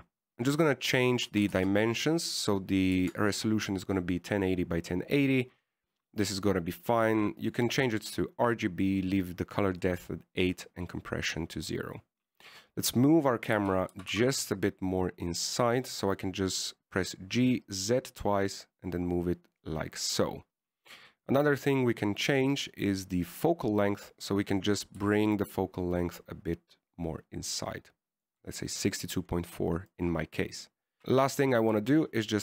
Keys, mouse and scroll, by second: 0.2 click, 8.7 click, 11.1 click, 14.8 g, 21.7-22.6 scroll down 1, 22.6 click, 22.6-23.5 scroll down 1, 23.5 click, 24.5 click, 26.2 click, 31.0 right click, 31.2 click.